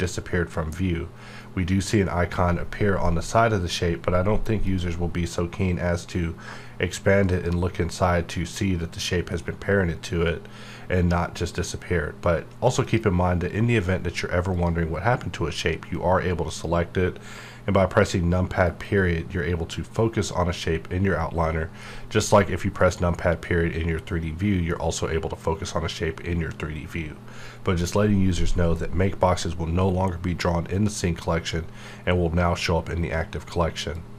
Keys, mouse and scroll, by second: 4.6 click, 7.2 click, 12.8 click, 16.4 click, 18.6 KP_Decimal, 21.8 scroll down 1, 22.8 KP_Decimal, 23.3 scroll down 1, 27.2 scroll down 1.